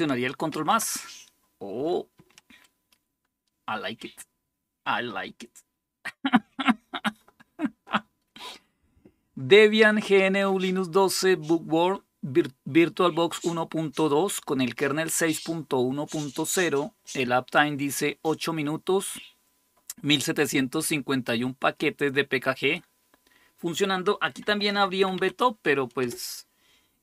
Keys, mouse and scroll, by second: 0.3 ctrl++, 1.9 ctrl++, 24.0-25.4 typing, 25.8 Return.